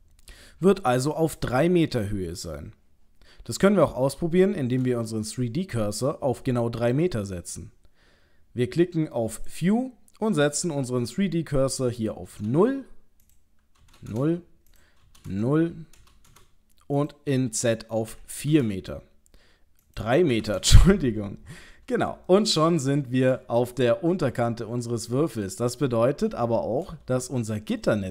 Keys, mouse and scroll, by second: 0.5 scroll down 1, 1.4 scroll down 2, 4.1 shift+middle click, 9.3 click, 12.0 click, 14.1 KP_Enter, 15.1 KP_0, 15.3 KP_Enter, 17.0 click, 19.9 click, 22.3 shift+middle click, 23.6-24.4 scroll down 1, 24.4 scroll down 1, 24.5 shift+middle click, 25.2 shift+middle click, 27.2 ctrl+middle click.